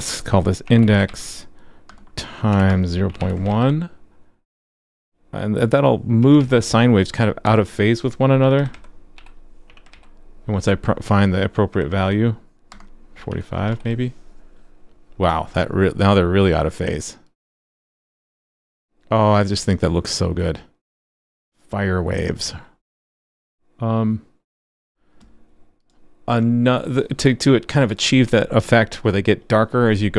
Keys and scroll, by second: 3.5 super+s, 6.4 super+s, 9.9 super+s, 13.7 super+s.